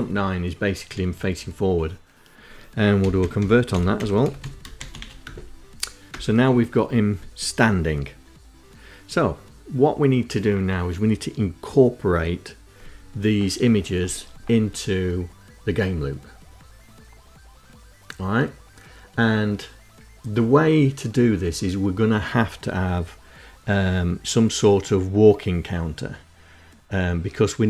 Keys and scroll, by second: 2.0-4.0 typing, 4.3 Return, 5.2 Return.